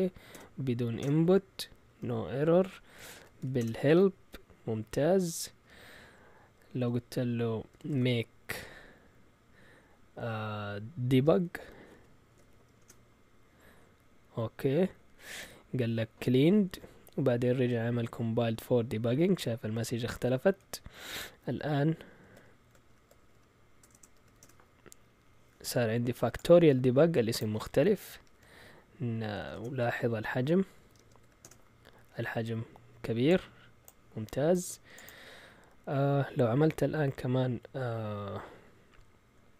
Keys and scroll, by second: 0.3 BackSpace, 1.0 Return, 1.8 typing, 2.9-3.9 typing, 7.5-8.5 typing, 11.2-12.9 typing, 22.9 ctrl+l, 22.9-24.6 typing, 29.4-32.7 typing.